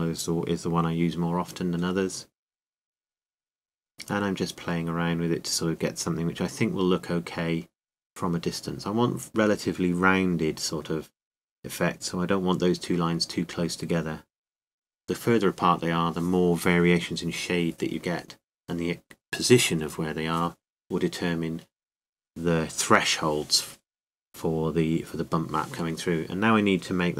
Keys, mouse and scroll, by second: 7.6-9.3 drag, 13.3-15.2 drag.